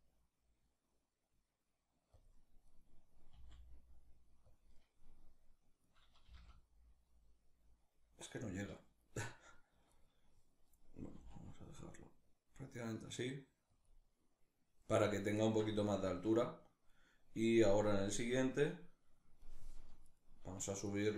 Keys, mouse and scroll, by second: 1.9 click, 2.3 right click, 2.9 r, 4.2 click, 5.5 right click, 5.9 g, 7.9 right click, 9.5 right click, 10.8 r, 13.5 click, 15.1-17.5 shift+middle drag, 17.5-19.7 drag, 19.7 right click, 20.5 shift+right click.